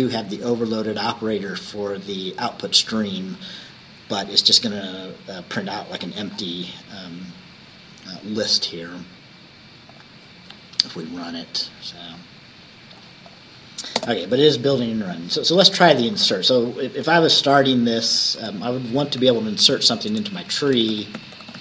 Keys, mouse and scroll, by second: 0.2-0.6 scroll up 2, 1.3 scroll down 2, 3.7-4.1 scroll up 2, 6.1 scroll down 2, 10.0 click, 12.2-13.3 drag, 13.3 click, 14.1 space, 15.8 click, 17.5 Up, 18.5 Return, 19.3-21.6 typing.